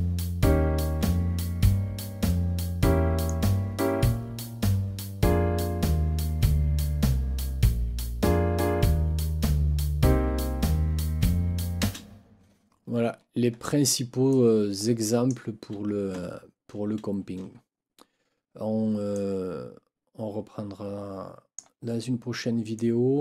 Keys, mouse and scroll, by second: 2.3 click, 11.8 space, 13.1 ctrl+scroll down 2, 14.3 click, 17.9 ctrl+scroll up 2, 19.1-21.7 drag, 22.7-23.2 drag.